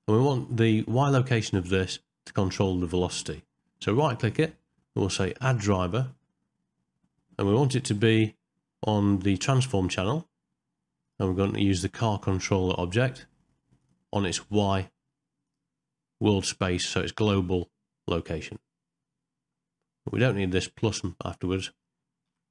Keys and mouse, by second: 4.0-22.5 right drag.